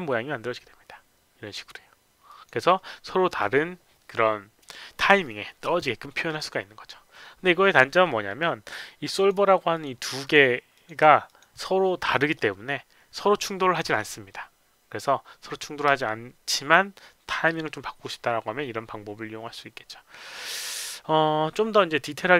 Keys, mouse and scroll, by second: 2.3 click, 9.1 click, 9.7 click, 10.2 click, 10.7 click, 11.3 click.